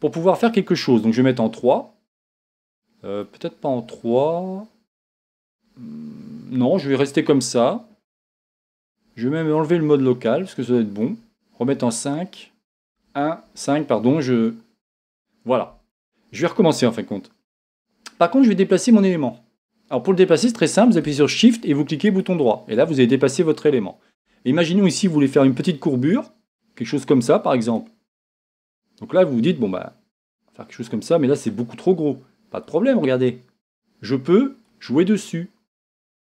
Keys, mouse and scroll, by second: 1.3 KP_3, 9.8 KP_Divide, 11.7 KP_5, 13.1 KP_1, 13.4 KP_5, 22.1-25.4 shift+right drag, 25.4-31.4 drag, 33.7 click.